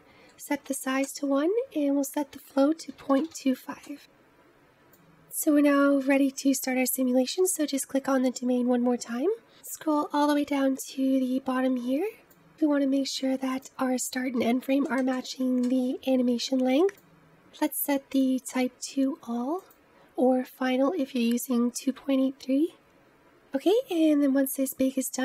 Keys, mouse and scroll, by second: 6.1 click, 9.8-13.5 scroll down 39, 13.5-16.5 drag, 18.1-21.1 drag.